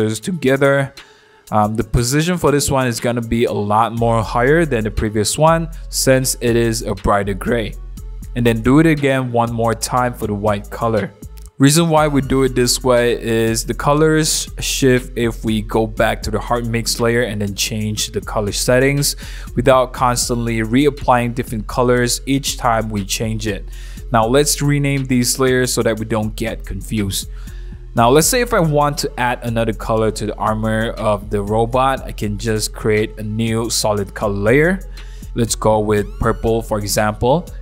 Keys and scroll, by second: 24.2-27.7 typing.